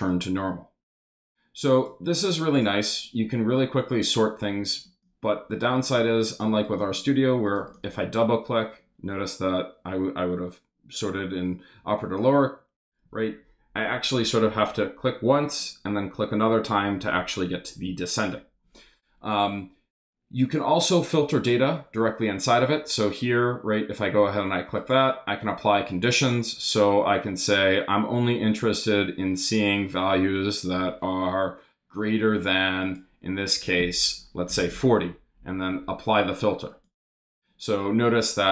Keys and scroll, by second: 34.2-35.1 typing.